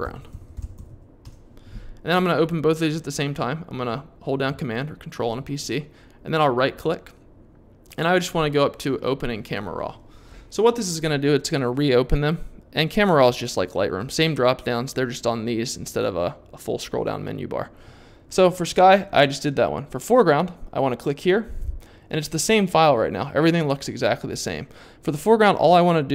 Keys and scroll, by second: 0.0-1.4 typing.